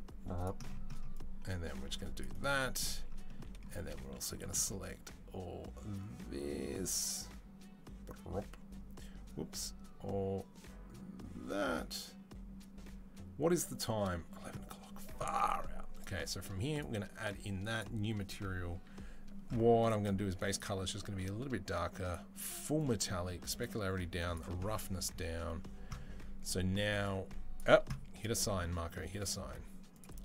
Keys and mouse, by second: 27.2-30.2 drag.